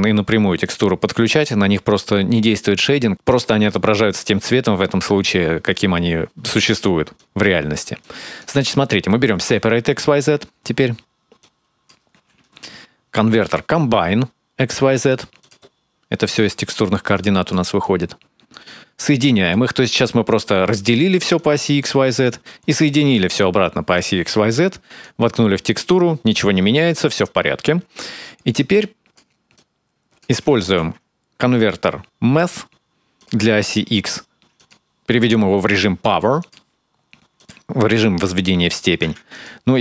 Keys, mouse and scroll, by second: 0.4 click, 7.0 click, 7.8 click, 8.6 middle click, 9.6-10.8 scroll up 1, 10.8-11.2 scroll up 2, 11.2 click, 12.2 shift+a, 15.4 middle click, 16.3-17.0 scroll down 1, 17.0 click, 17.0-17.6 scroll down 2, 17.6 click, 18.9 click, 20.2 click, 21.2 click, 22.1 click, 23.8 click, 27.1 click, 28.5 click, 29.4 click, 30.3 shift+a, 33.3-34.4 scroll up 3, 33.7 middle click, 34.4 click, 37.2 click.